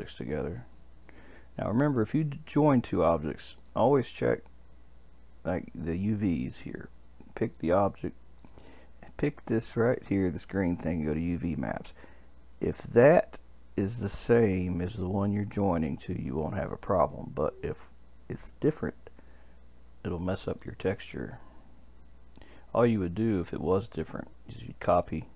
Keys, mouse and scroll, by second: 0.0 shift+click, 3.6 click, 7.5 click, 8.4 click, 11.2-14.3 drag, 15.2 click, 16.8 click, 20.6 shift+click, 23.2 click.